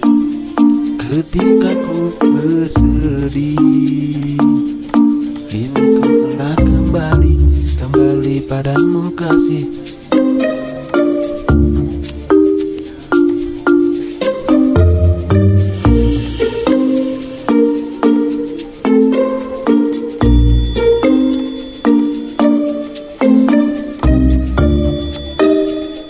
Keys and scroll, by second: 1.1 v.